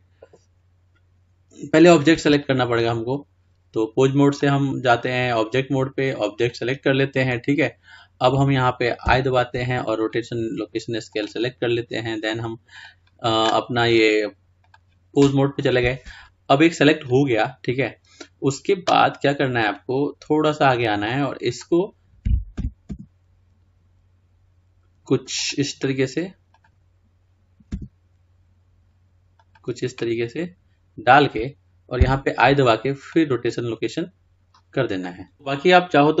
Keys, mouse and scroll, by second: 0.0 i, 20.0-25.5 drag, 27.0 click, 29.6 r, 33.4 i.